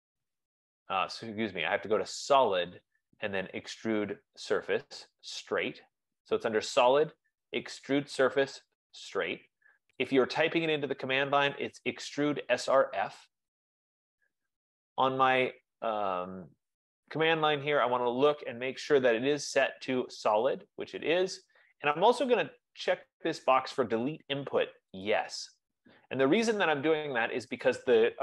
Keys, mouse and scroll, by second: 10.3-15.4 drag, 25.4 click.